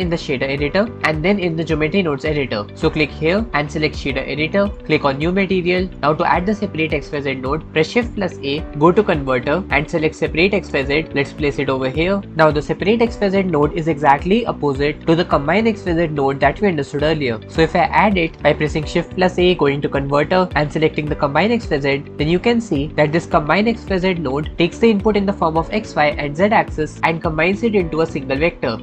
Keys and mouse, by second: 3.5-4.8 drag, 5.8-7.0 drag, 8.5 shift+a, 18.1 shift+a.